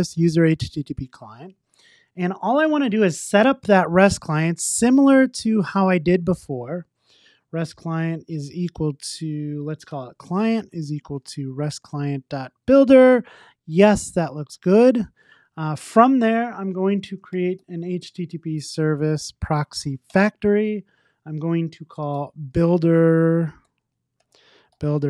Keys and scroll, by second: 6.2 Return, 12.4 Tab, 20.1 Return, 24.9 Return.